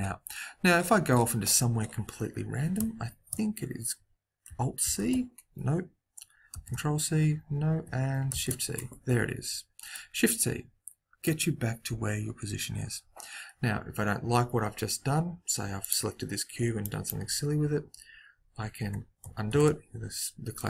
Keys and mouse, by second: 4.8 alt+c, 6.4 ctrl+c, 8.3 shift+c, 9.9-11.7 right drag, 15.8-17.3 right drag, 16.8 click, 19.4 ctrl+z, 20.5-20.6 drag.